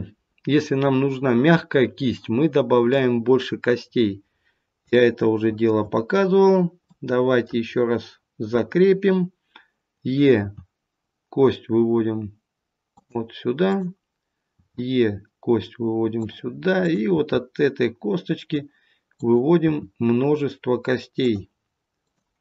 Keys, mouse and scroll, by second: 1.1-1.7 scroll up 1, 1.7-2.1 scroll down 1, 2.1 middle click, 3.8-4.7 scroll up 1, 4.7 scroll up 1, 4.9 shift+middle click, 5.9 scroll up 1, 6.7 middle click, 6.7-7.0 scroll up 1, 7.7 scroll down 1, 10.3 e, 13.5 click, 14.6 e, 17.0 click, 17.0 e, 19.0 click, 19.6 e, 21.9 click.